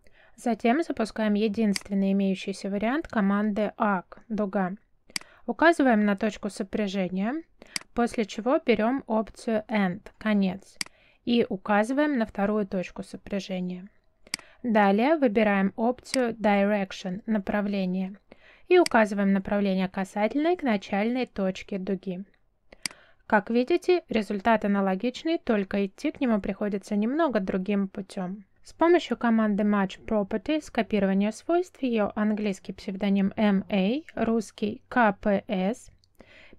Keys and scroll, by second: 34.3 m.